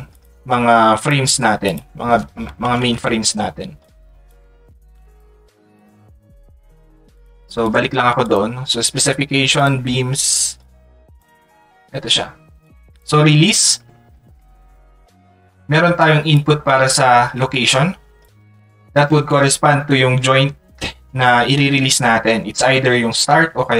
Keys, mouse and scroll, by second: 1.0 click, 3.8 click, 5.8 click, 7.2 click, 10.6 click.